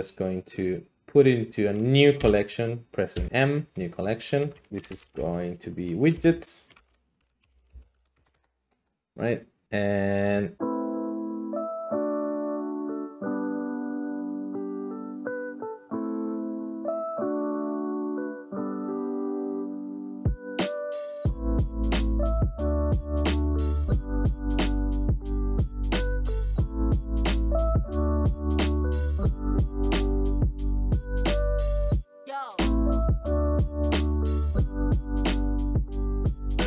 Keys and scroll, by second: 2.2 ,, 3.1 m, 4.5-4.9 typing, 6.1-8.8 typing, 11.6 Escape, 11.6 d, 12.1 Tab, 13.0 s, 13.2 Escape, 13.4 s, 14.5-15.2 typing, 15.4 Tab, 16.2 Tab, 16.3 a, 16.4 s, 17.4 Tab, 18.1-24.8 typing, 19.8 Escape, 22.1 Tab, 25.7 Tab, 26.0 e, 26.3 e, 27.2 Tab, 27.8 alt+s, 28.4-30.4 typing, 29.1 ctrl+a, 29.7 Escape, 29.9 Tab, 30.6 alt+z, 30.8 alt+z, 32.2-32.9 d, 34.0 a, 34.8 Tab, 35.3-36.6 typing.